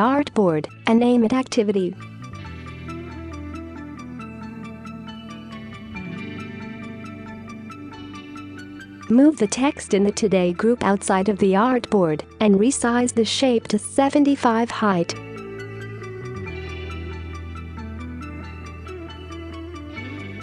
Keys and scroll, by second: 2.9 space, 5.1-6.9 typing, 19.7 typing, 20.3 Return.